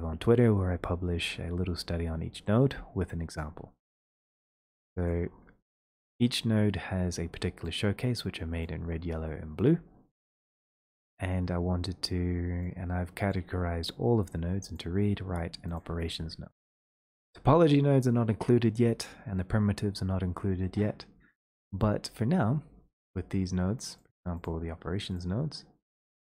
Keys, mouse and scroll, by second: 3.4 click, 5.0 middle click, 5.2-5.7 scroll, 7.6 middle click, 7.8 scroll, 8.8 middle click, 8.9 middle click, 9.0 scroll, 10.4-11.2 scroll, 13.3 click, 14.7 click, 15.8 click, 24.0 click, 24.5-25.2 scroll, 25.2-25.8 scroll.